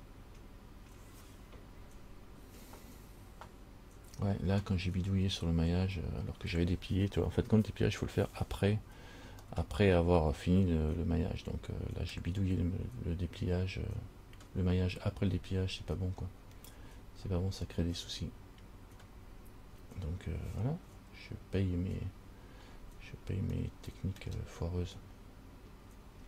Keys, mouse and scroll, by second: 9.7 middle click, 16.4-18.1 scroll up 8, 18.1-18.8 scroll up 2, 18.8-21.1 scroll up 1, 22.8-23.7 scroll down 1, 23.7 scroll down 2, 23.8 middle click, 24.9-26.1 scroll up 3.